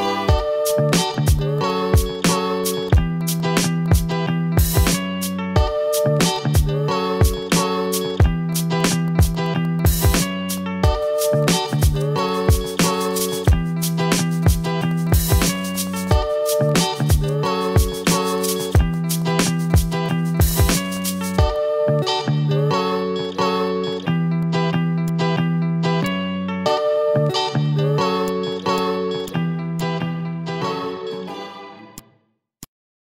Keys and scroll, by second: 0.7 ctrl+z, 1.3 ctrl+z, 3.0 ctrl+z, 3.5 ctrl+z, 3.7 ctrl+z, 4.1 ctrl+z, 8.4 a, 10.0 ctrl+z, 11.0 ctrl+z, 11.8 ctrl+z, 12.5 ctrl+z, 12.9 ctrl+z, 14.0 ctrl+z, 14.7 a, 16.5 ctrl+z, 24.6 Delete, 27.9 v, 30.5 ctrl+c, 30.6 ctrl+v.